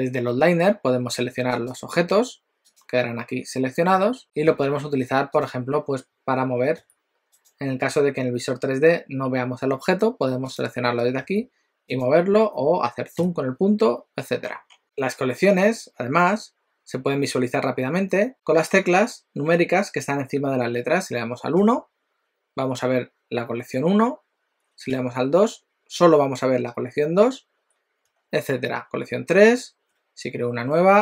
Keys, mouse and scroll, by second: 1.7 click, 2.7 click, 4.2 click, 4.2 g, 4.6 alt+a, 5.5 click, 6.8 g, 10.5 click, 11.4 g, 13.2 KP_Decimal, 14.5-14.8 scroll down 6, 25.0 2, 28.2 3.